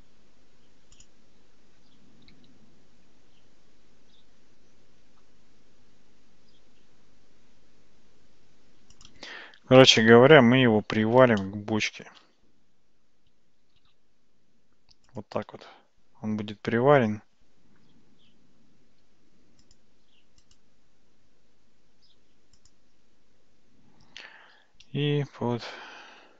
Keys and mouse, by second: 2.3 g, 10.0 shift+middle click, 11.5 shift+middle click, 13.7 g, 19.7 click, 20.6-22.8 right drag.